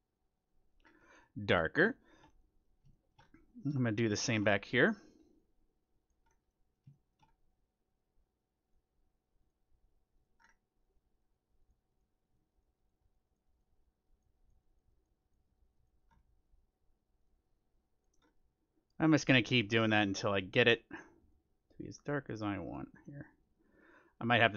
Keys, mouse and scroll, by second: 0.8 scroll down 2, 0.8 middle click, 1.0-3.8 middle drag, 5.3-7.1 drag, 5.3-6.3 middle drag, 6.5-8.8 middle drag, 7.9-24.5 drag, 10.3-12.4 middle drag, 16.0-18.0 middle drag, 18.2-20.1 middle drag.